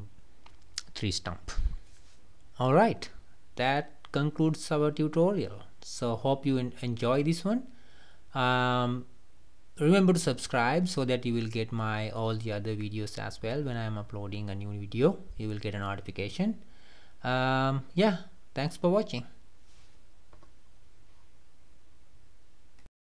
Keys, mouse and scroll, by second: 2.8 click, 3.2-3.7 middle drag, 3.7 scroll up 1, 3.7 scroll down 2, 4.0 middle click, 4.5 scroll up 1, 4.6-4.9 scroll down 1, 4.9-5.5 middle drag, 5.5 scroll down 1, 5.8-9.5 middle drag, 9.5 scroll up 3, 9.8-10.7 middle drag, 10.7 scroll up 1, 10.8 scroll down 2, 11.1-11.6 middle drag, 11.6-12.1 scroll down 2, 12.1-23.1 middle drag.